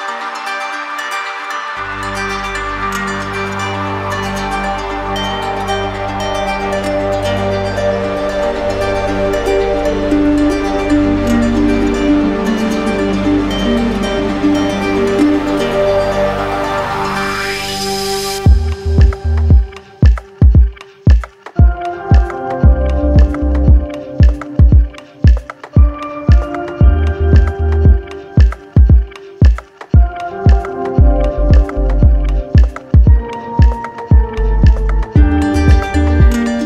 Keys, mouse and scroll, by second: 0.5 click, 1.3 click, 2.4 click, 4.3 click, 4.7 shift+click, 7.2 click, 7.6 shift+click, 8.3 alt+click, 10.8 click, 11.7-12.8 right drag, 12.8 click, 14.7 click, 15.1 click, 16.7 click, 17.6 click, 18.4 alt+click, 19.3 right click, 20.3 click, 21.1 click, 21.6 click, 22.1 click, 22.5 click, 23.1 click, 23.5 click, 24.2 click, 24.8 click, 25.3 click, 25.8 click, 26.3 click, 27.4 click, 27.8 click, 28.6 right click, 29.3 alt+right click, 30.7 alt+click, 32.1 alt+click, 32.4 alt+click, 33.3 alt+click, 34.2 ctrl+z, 34.7 alt+click, 36.0 right click.